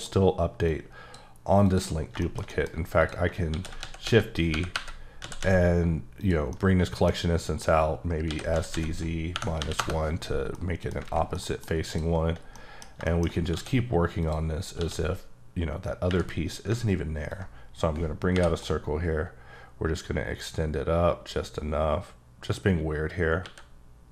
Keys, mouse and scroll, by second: 0.6 click, 1.6 click, 1.9 scroll down 3, 2.2 shift+middle click, 3.0 click, 3.5 d, 3.8 x, 4.5 y, 5.2 z, 6.2 click, 6.5 middle click, 8.3 s, 8.5 z, 9.3 KP_Subtract, 9.6 KP_1, 9.8 KP_Enter, 10.5 middle click, 11.0 alt+a, 11.3 middle click, 11.8 click, 12.5 middle click, 13.0 shift+middle click, 13.5 d, 14.2 click, 14.7 d, 17.3 ctrl+click, 18.3 j, 23.4 e.